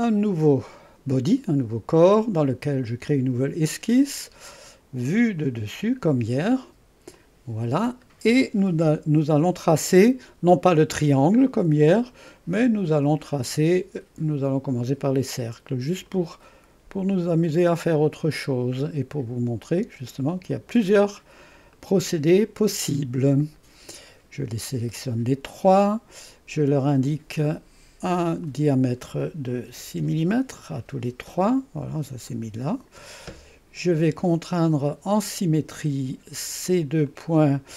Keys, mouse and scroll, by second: 3.0 click, 5.4 click, 7.2 click, 8.6-10.4 right drag, 13.3 click, 13.7-14.7 drag, 15.3 click, 16.1 click, 17.6 click, 18.4 click, 19.6 click, 20.6 click, 21.4 click, 21.8 right click, 22.9-24.8 drag, 27.1 click, 28.4 click, 29.7 6, 30.0 Return, 32.3 click, 35.3 click, 37.1 click.